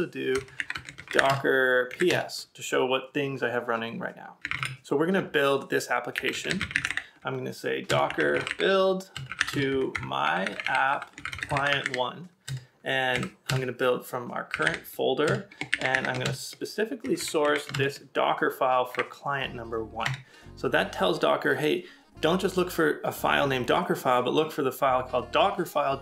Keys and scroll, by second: 4.4 typing, 17.0 BackSpace, 18.9 1, 20.1 Tab.